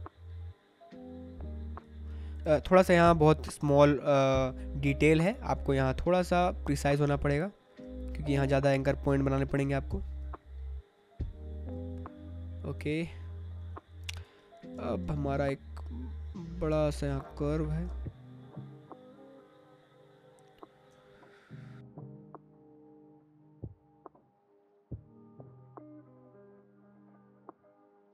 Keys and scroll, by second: 2.4 ctrl+z, 7.6 space, 9.5 space, 14.6 space, 17.8 space, 23.7 space, 25.9 space, 27.8 space.